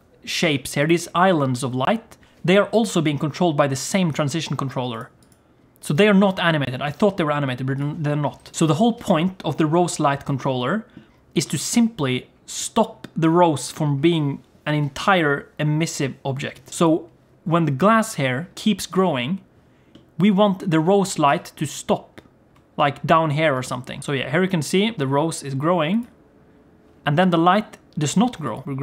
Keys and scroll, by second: 21.1 g.